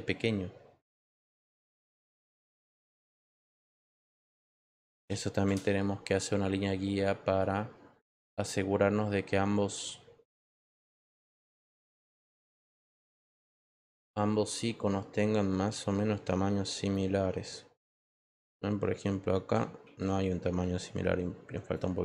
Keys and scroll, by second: 19.8 ctrl+t.